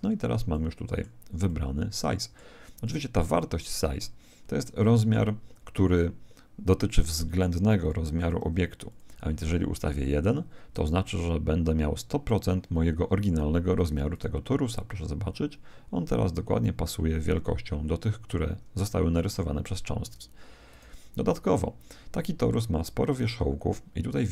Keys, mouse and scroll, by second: 0.5-4.6 middle drag, 4.7 middle click, 7.8 click, 14.1 right click, 14.7 click, 20.7 right click.